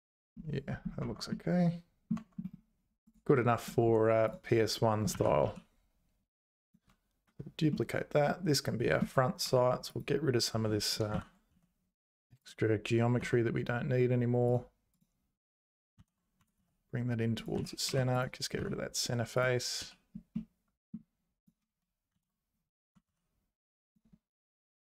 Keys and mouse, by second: 1.0 Tab, 1.3 middle click, 2.1 Tab, 5.1 shift+d, 7.9-9.0 middle drag, 9.0 Tab, 9.4 3, 9.9 click, 11.1 ctrl+l, 11.5 x, 13.2 x, 16.0 ctrl+l, 16.4 g, 17.5 z, 17.8 3, 18.6 x, 19.8 z, 20.3 middle click, 21.4 click, 22.1 ctrl+l, 22.9 g.